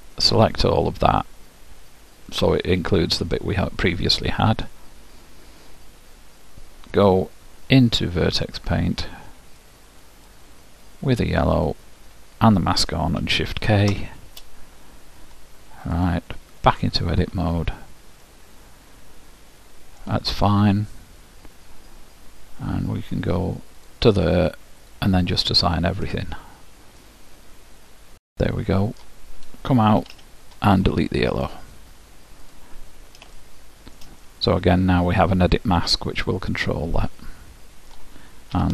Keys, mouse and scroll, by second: 0.6-2.5 drag, 4.3-6.1 middle drag, 8.6 click, 9.7-12.9 drag, 14.1 shift+k, 17.0-18.1 drag, 18.3-20.3 middle drag, 24.0-28.3 drag, 27.3-29.1 middle drag, 30.0 Tab, 31.4-34.2 drag, 33.4-35.9 middle drag, 38.5 ctrl+w.